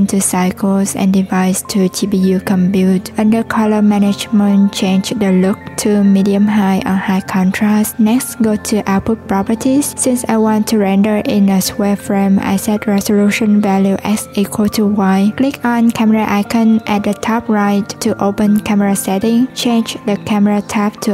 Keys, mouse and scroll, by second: 3.0-3.4 drag, 3.4 scroll down 3, 3.7-6.1 scroll up 1, 6.1-8.8 drag, 9.4 click, 10.0 click, 11.2-14.3 drag, 14.6 click, 16.2-19.2 drag.